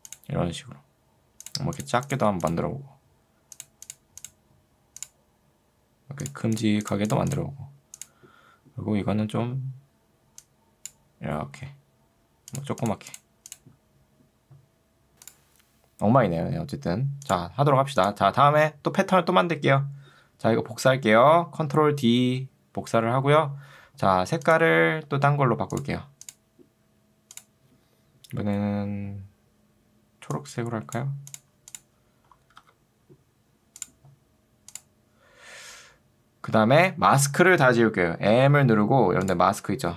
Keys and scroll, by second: 21.9 ctrl+d, 38.5 m.